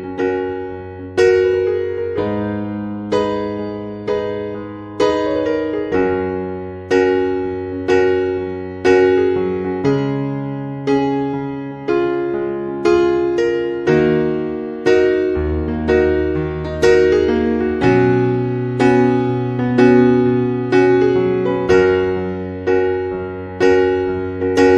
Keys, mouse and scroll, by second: 1.1 a, 3.3 right click, 8.9-9.3 scroll down 6, 9.2 scroll up 1, 9.6-10.5 scroll down 1, 10.8 scroll down 6, 11.7 scroll down 4, 13.7 click, 15.0 scroll up 3, 15.6 scroll down 1, 16.4-16.7 scroll up 5, 17.7 click, 19.7 scroll down 1, 19.9 scroll up 2, 20.7-22.8 scroll up 3.